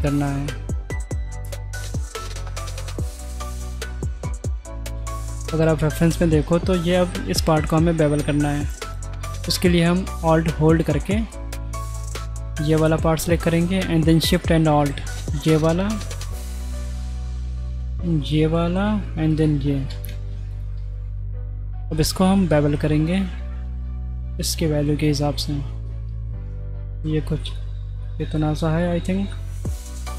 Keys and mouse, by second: 0.5 middle click, 2.4 middle click, 3.2 click, 5.3 drag, 6.3 drag, 9.0 middle click, 11.1 alt+click, 12.1 middle click, 13.4 shift+middle drag, 15.2 middle click, 16.0 middle click, 17.0 shift+middle drag, 17.8-18.3 middle drag, 19.3 alt+shift+click, 20.2 ctrl+z, 20.9-21.8 middle drag, 22.0 middle click, 22.6 shift+middle click, 22.9 click, 24.4 ctrl+b, 28.1 middle click, 29.8 middle click.